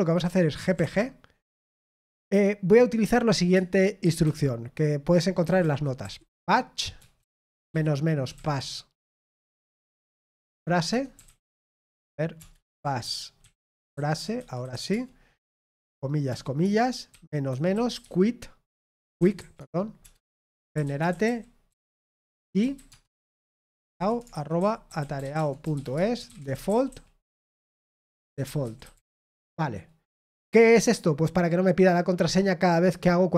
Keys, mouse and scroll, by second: 24.8-28.9 typing.